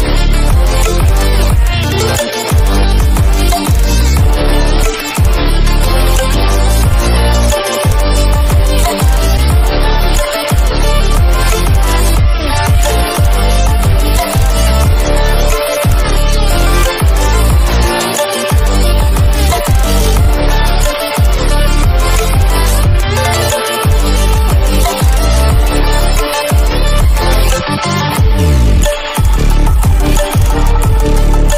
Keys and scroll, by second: 1.1 ctrl+-.